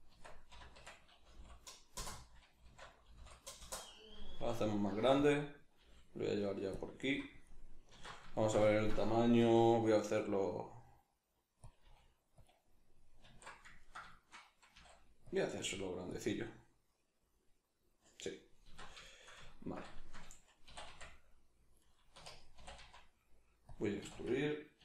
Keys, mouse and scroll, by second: 0.1 Tab, 0.5 r, 5.3 click, 5.8 g, 6.8 click, 7.1 s, 7.5 click, 7.9 alt+q, 8.3-11.7 shift+middle drag, 9.4 s, 11.7 click, 11.9 g, 12.5 click, 13.3 alt+q, 13.8-15.4 ctrl+middle drag, 14.7 s, 15.4 click, 15.6 g, 16.2 click, 16.3 middle click, 18.6 alt+q, 19.0 shift+middle click, 19.5 ctrl+middle click, 19.9 shift+middle click, 20.6 e, 21.9 right click, 22.1 1, 22.6 e, 23.7 click, 24.0 a.